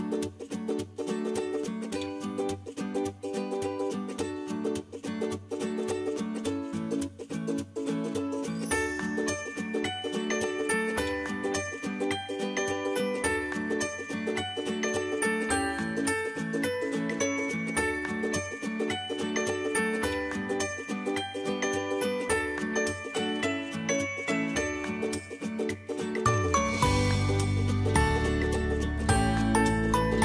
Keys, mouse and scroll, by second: 8.3 typing, 10.6 ctrl+BackSpace, 10.8 click, 11.7 right click, 13.8 click, 16.7-20.0 drag, 20.0 typing, 21.5 ctrl+t, 22.6 right click, 24.6-25.1 typing, 25.4 click, 26.6 click, 26.6-27.3 typing, 27.2 click, 28.5 click, 28.6 space, 30.0-30.2 drag.